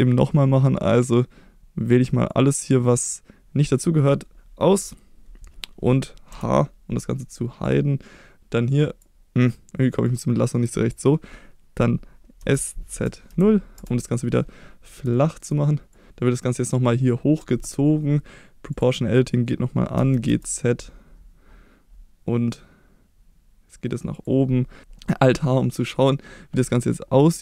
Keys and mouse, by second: 0.3-1.9 drag, 2.4-3.8 drag, 6.3 h, 7.7-9.0 drag, 10.2 click, 12.4 s, 12.9 z, 13.3 0, 13.8 Return, 15.2 shift+middle click, 15.9 click, 18.7 click, 20.0 g, 20.3 z, 24.1 click, 24.8 alt+h, 25.6 middle click, 26.8 middle click.